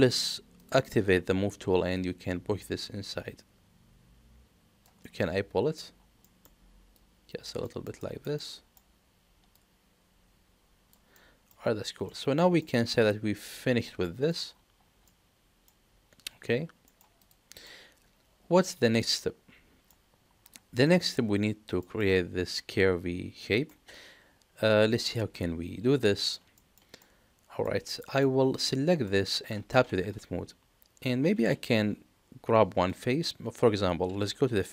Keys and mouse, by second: 0.5 click, 2.0-4.8 drag, 5.0 middle click, 6.2 middle click, 6.9 click, 7.6 middle click, 8.0 shift+middle drag, 8.3-8.7 middle drag, 9.5-10.9 drag, 11.1-11.5 middle drag, 12.0-12.4 middle drag, 12.6 shift+middle click, 13.0-14.2 middle drag, 15.0-15.7 middle drag, 16.8 middle click, 17.1 click, 17.6-19.8 middle drag, 20.9 middle click, 21.9 middle click, 23.6-24.9 middle drag, 26.0 middle drag, 26.5 shift+middle drag, 27.0-27.6 middle drag, 28.0 shift+middle drag, 28.5 click, 29.0 middle click, 29.8 Tab, 33.2 click.